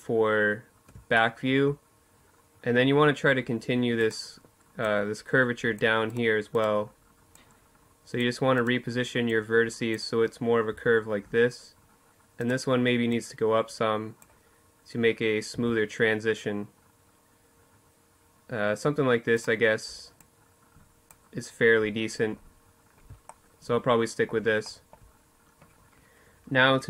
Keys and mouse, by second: 2.8 right click, 4.9-7.0 right drag, 7.3 right click, 9.3-11.1 drag, 11.1-12.9 right drag, 12.9-14.3 drag, 14.3 a, 18.1-19.8 right drag, 18.9-21.4 drag, 21.4 middle click, 22.2 middle click, 22.4 click, 22.7-24.2 middle drag.